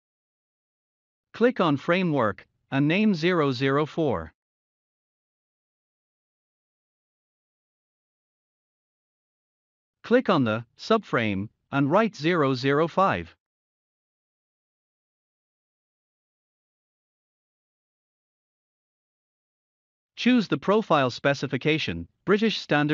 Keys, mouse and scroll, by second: 0.0-0.7 typing, 1.4-5.7 drag, 5.7-6.6 typing, 8.7 click, 12.2-14.9 drag, 14.9-15.7 typing, 17.0 click.